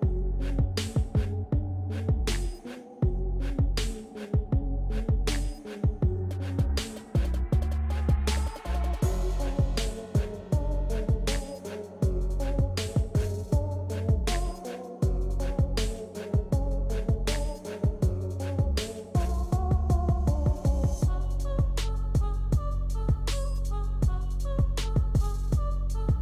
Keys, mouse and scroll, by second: 1.4 typing, 11.0-14.6 drag, 11.0 typing, 14.6-18.2 drag.